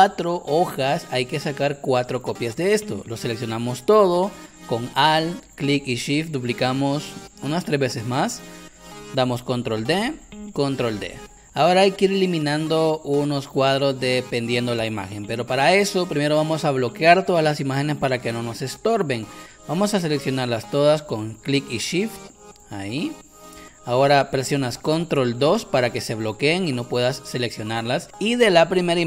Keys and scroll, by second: 9.9 ctrl+d, 25.5 ctrl+2.